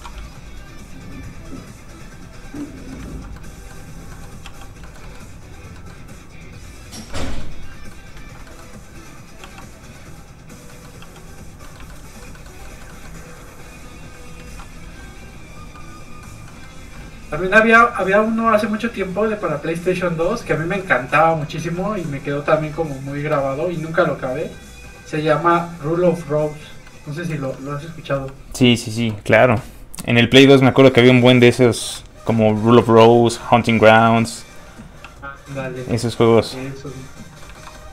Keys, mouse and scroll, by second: 0.1 ctrl+z, 1.2 z, 1.3 click, 2.6 middle click, 3.1 ctrl+z, 3.3 middle click, 4.4 f, 4.6 click, 4.8 shift+middle click, 5.0 middle click, 5.1 middle click, 6.3 click, 7.1 middle click, 8.1 ctrl+z, 8.5 middle click, 9.4 f, 9.6 click, 10.7 middle click, 11.0 f, 11.1 click, 11.6 middle click, 11.9 shift+middle click, 12.6 shift+middle click, 12.9 middle click, 13.0 middle click, 13.6 click, 14.4 ctrl+z, 14.9 f, 15.0 click, 15.7 middle click, 17.7 click, 20.5 middle click, 21.6 ctrl+z, 22.0 middle click, 22.1 middle click, 22.5 ctrl+z, 23.8 click, 23.9 click, 26.8 middle click, 27.3 shift+middle click, 27.5 middle click, 27.6 middle click, 28.1 f, 28.3 click, 31.9 click, 32.5 shift+middle click, 34.0 middle click, 34.1 middle click, 34.6 f, 34.8 click, 35.0 f, 35.1 click, 35.4 scroll down 1, 35.5 middle click, 35.9 f, 36.0 click, 37.4 shift+middle click.